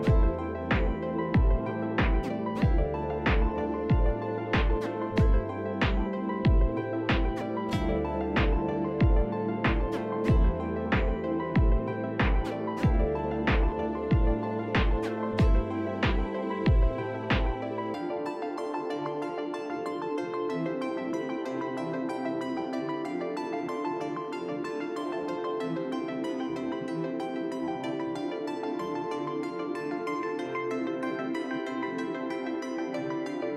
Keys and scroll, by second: 4.4-5.4 typing, 14.3 Delete, 18.8 shift+s, 20.5 shift+s, 28.6 shift+s, 29.5 shift+s, 30.0 shift+s, 31.0 shift+s.